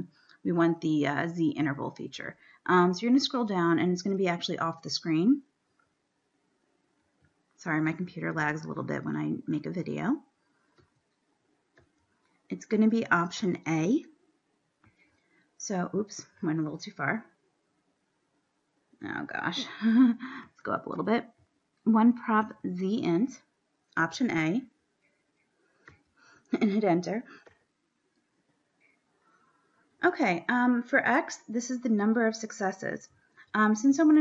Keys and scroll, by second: 3.1 Down, 3.3 Down, 3.6 Down, 4.2 Down, 5.3 Down, 6.3 Down, 7.6 Down, 8.1 Down, 8.7 Down, 10.1 Down, 10.9 Down, 12.1 Down, 13.3 Down, 20.5 Up, 20.7 Up, 21.6 Up, 22.8 Up, 26.1 Down, 27.7 Return.